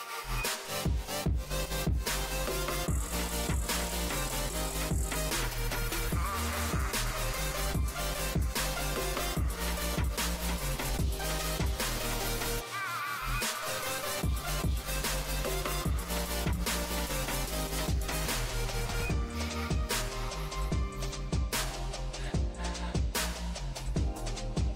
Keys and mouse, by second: 3.3 right click, 3.7-5.4 right drag, 4.7 e, 5.4 click, 6.0 right click, 6.6 click, 7.6 s, 12.7 g, 14.3 g, 15.3 g, 17.1 g, 18.3 g, 20.3 g, 22.0 g, 24.3 g.